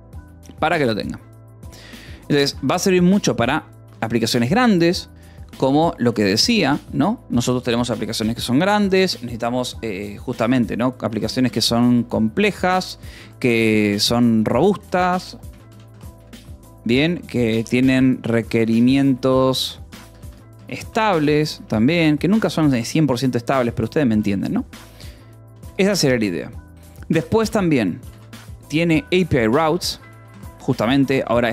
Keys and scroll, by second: 3.2 k, 4.4 Escape, 4.8 l, 5.9 l, 6.4 l, 10.2-21.8 typing, 22.4 ctrl+s, 23.0 Escape, 23.2-26.0 typing, 27.9-29.4 typing, 29.9 Escape, 30.6-31.5 typing.